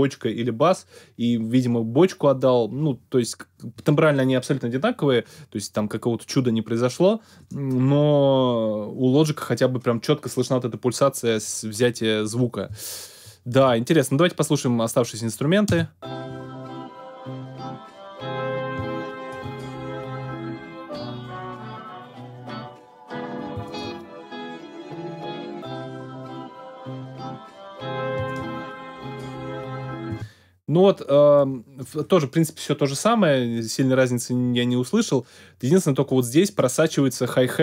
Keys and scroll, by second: 15.6 space, 30.1 space.